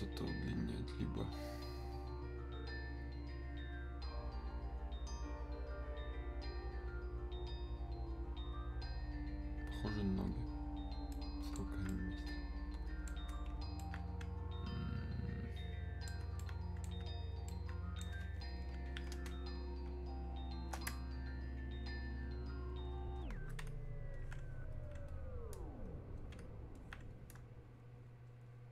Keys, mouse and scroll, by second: 11.1-19.3 alt+right drag, 19.3 space, 20.1 click, 20.2 space, 21.1-28.7 shift+drag.